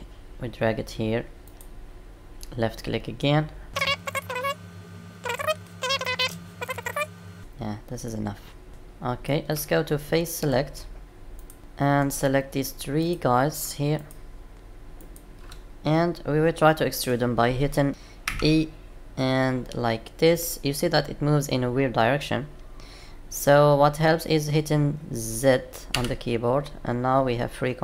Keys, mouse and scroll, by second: 18.2 e.